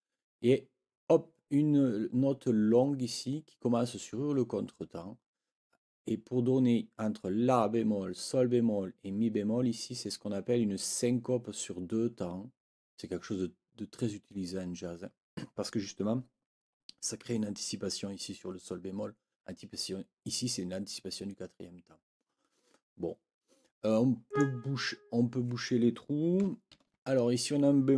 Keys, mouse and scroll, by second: 24.3 click, 26.7 ctrl+l.